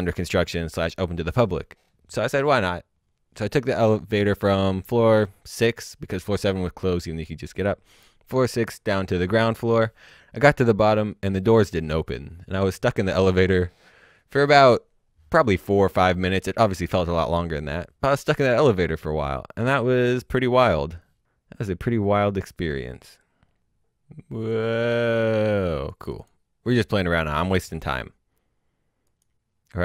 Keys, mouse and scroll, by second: 6.6-7.4 scroll down 1, 9.5 click, 10.4 click, 21.8 click, 29.1 click.